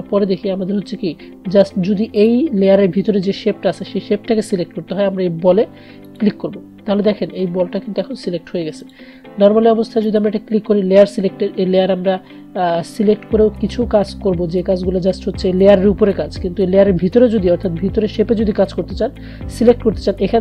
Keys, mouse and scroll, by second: 2.2 click, 6.2 click, 8.9 click.